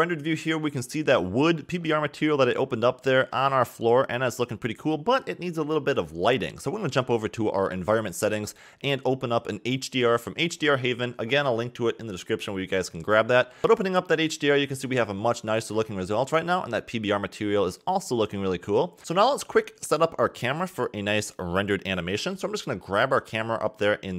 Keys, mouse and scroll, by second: 0.5 scroll up 2, 2.1-4.2 middle drag, 4.2 scroll down 2, 5.0 scroll up 1, 7.4 click, 10.4-12.1 drag, 16.6-19.0 middle drag, 19.0-19.3 scroll down 3, 19.3-21.2 middle drag, 21.2 click, 22.3 ctrl+alt+KP_0, 23.1 click, 23.8 g.